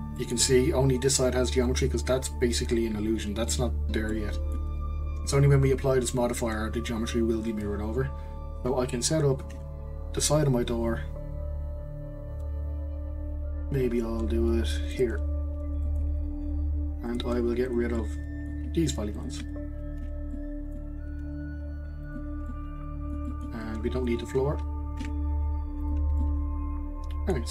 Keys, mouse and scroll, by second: 0.1-3.2 middle drag, 4.1 middle click, 4.8-7.9 scroll up 1, 9.6 ctrl+r, 15.4 scroll down 3, 15.8-17.1 middle drag, 17.1 click, 18.0-19.1 middle drag, 19.1 shift+click, 20.0 x, 20.3 middle click, 21.2 x, 22.5-23.9 middle drag, 23.9 click, 25.0 x, 26.1 scroll down 1, 26.2-27.5 middle drag.